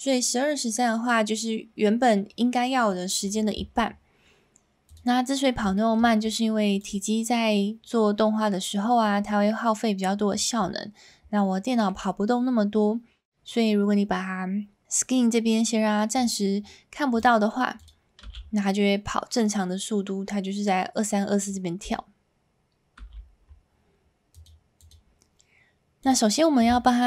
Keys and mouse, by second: 4.9 click, 5.7 shift+middle drag, 11.7 middle click, 16.1 click, 17.7 click, 18.2 space, 23.0 space, 24.3 click, 24.8 click, 26.0 click.